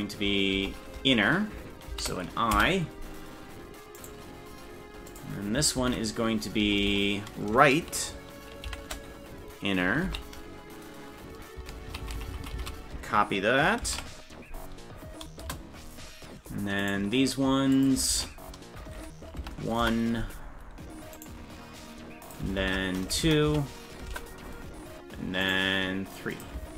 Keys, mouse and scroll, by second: 4.0-5.1 right drag, 5.1-15.8 drag, 6.8 BackSpace, 12.0 shift+Left, 12.3 shift+Left, 12.5 shift+Left, 12.7 shift+Left, 16.9 right click, 17.7-20.1 drag, 21.2 right click, 22.2-24.4 ctrl+drag, 25.5 right click, 26.3-26.7 drag.